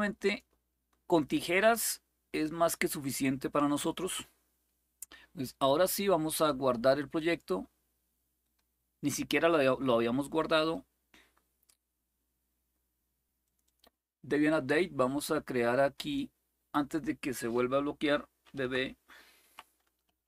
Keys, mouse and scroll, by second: 0.0 click, 3.5 click, 6.0 click, 6.8-10.3 drag, 10.3-11.1 scroll down 1, 11.1-13.2 scroll down 1, 13.2-18.2 drag, 18.2-20.2 typing.